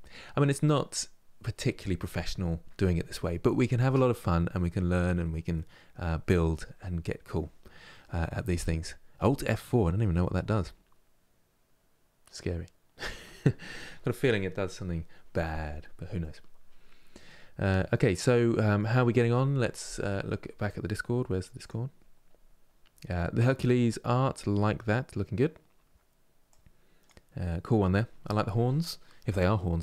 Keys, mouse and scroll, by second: 15.3 scroll down 2, 15.9-17.4 middle drag, 17.4-18.7 scroll up 2, 18.7-29.8 middle drag.